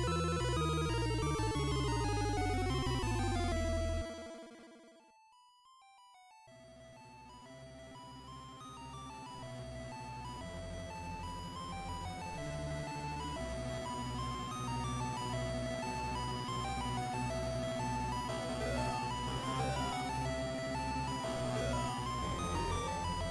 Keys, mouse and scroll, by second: 1.8-2.3 scroll down 1, 2.7 middle click, 2.7-3.3 scroll down 1, 4.1-4.8 scroll down 1, 4.8 Tab, 4.8-5.3 scroll down 1, 5.3-5.9 scroll down 5, 6.3 s, 10.5 click, 11.2 middle click, 12.9 KP_0, 14.6 middle click, 15.6 KP_7, 15.8-16.2 scroll down 1, 16.5-17.7 scroll down 5, 17.5 shift+middle click, 19.7 s, 21.0 s.